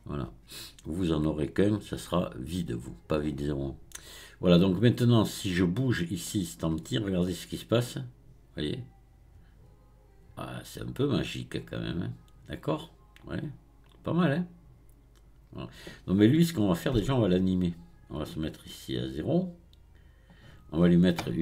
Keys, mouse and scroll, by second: 5.4 click, 6.3 click, 7.8-10.8 drag, 16.4-18.2 scroll down 1, 18.2-21.2 drag.